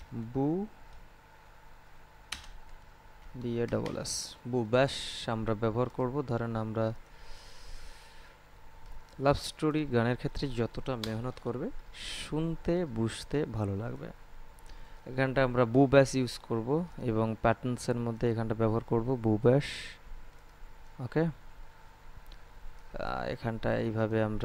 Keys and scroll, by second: 2.2-4.0 typing, 10.9 Return.